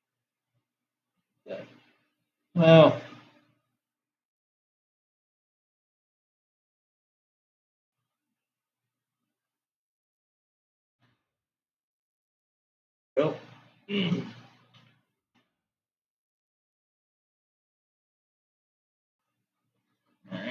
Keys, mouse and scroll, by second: 4.2 s, 9.8 g, 13.9 click, 15.2 g.